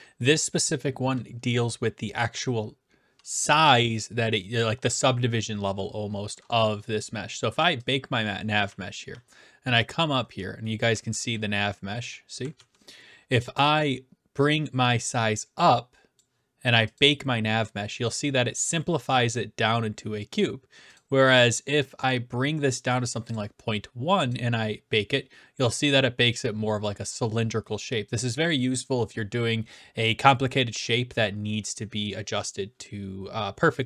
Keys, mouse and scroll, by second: 7.9-9.0 drag, 8.7-13.0 typing, 10.6-11.8 right drag, 13.0 right click, 16.2 click, 17.0 click, 20.9 click, 23.3 click, 24.3 click.